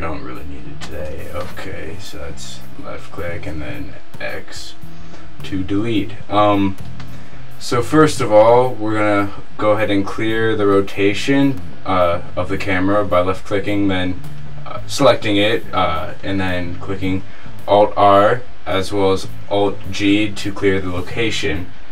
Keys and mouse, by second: 1.0 right click, 1.1 x, 1.8 right click, 2.8-4.5 middle drag, 9.0 middle click, 10.4 alt+r, 12.6-13.6 middle drag, 19.5 alt+g.